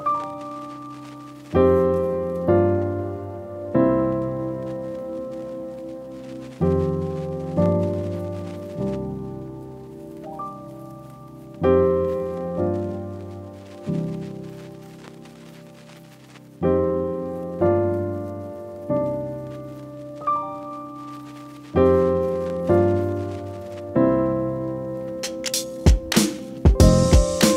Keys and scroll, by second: 5.5 f, 8.5 ctrl+v, 9.4-9.9 typing, 10.2 Return, 10.9 ctrl+t, 13.6 Return, 17.7 Left, 17.7 Left, 17.8 Left, 17.9 Left, 18.8 Up, 20.0 Right, 26.3 ctrl+s.